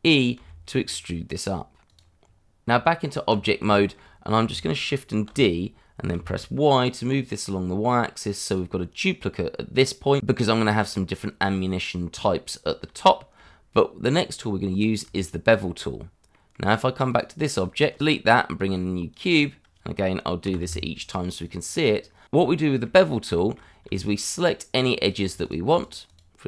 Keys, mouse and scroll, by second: 0.3 e, 1.8 click, 2.2-2.6 scroll down 1, 2.6 Tab, 3.7 shift+middle click, 5.3 shift+d, 6.1 y, 8.4 click, 9.6 scroll down 1, 10.7 click, 13.0 shift+middle click, 14.1 middle click, 16.3 middle click, 16.8 scroll up 1, 17.2 click, 18.0 Delete, 18.4 shift+a, 19.4 click, 19.6-20.4 scroll down 1, 20.4 g, 20.6 y, 21.4 click, 21.9 scroll up 1, 22.0 scroll down 1, 22.4 shift+middle click, 22.8 shift+middle click, 22.9-23.3 scroll up 1, 23.3 shift+middle click, 23.6 scroll up 1, 24.7 Tab, 25.1 click, 25.4 shift+click, 25.8 shift+double click, 26.0 click.